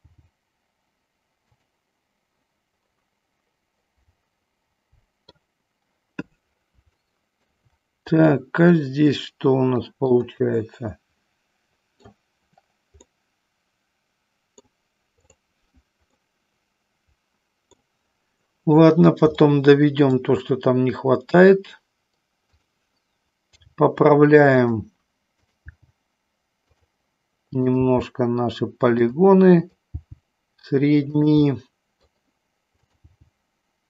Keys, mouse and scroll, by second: 1.6 click, 1.6 g, 3.1 middle click, 3.7-5.3 middle drag, 7.1 shift+middle click, 8.3 scroll up 1, 8.5 middle click, 9.7 middle click, 9.9 scroll down 1, 10.1-11.2 middle drag, 11.7 scroll up 1, 11.8 middle click, 13.2 scroll up 1, 13.4-14.7 middle drag, 15.2 click, 16.2-17.8 middle drag, 19.4 shift+middle click, 23.7 g, 24.7 click, 31.4 middle click.